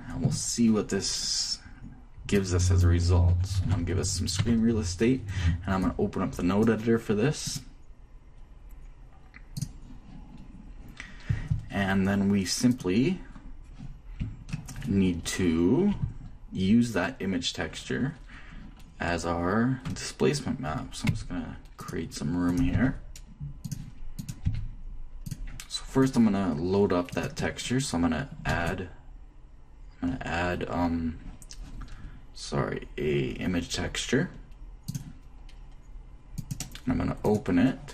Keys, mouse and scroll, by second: 2.7-4.5 drag, 4.0 y, 4.8 t, 6.2-7.2 drag, 8.9 click, 12.8 middle click, 13.1 right click, 13.3-14.9 drag, 15.1-17.0 shift+middle drag, 21.5 g, 22.9-24.6 drag, 23.1 g, 24.8 g, 28.9 click, 28.9 shift+a, 37.6 click.